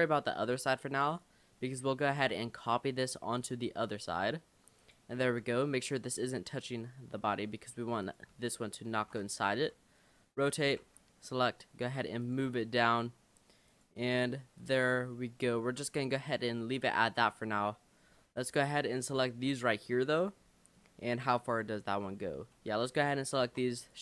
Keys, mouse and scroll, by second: 0.0-0.9 scroll down 3, 1.1 click, 1.6-2.1 scroll up 3, 2.1 g, 3.7 r, 5.3 g, 8.1 click, 8.9 l, 9.1 shift+d, 9.6 r, 10.9 g, 12.7 r, 14.1 g, 14.8 click, 15.1 scroll down 1, 15.2 middle click, 15.7-16.1 scroll down 5, 16.1 middle click, 17.0-17.3 scroll up 2, 18.1 l, 19.0 l, 19.5 l, 20.0 l, 20.3 middle click, 20.8 scroll down 1, 22.1 l, 22.6 l, 23.5 shift+d.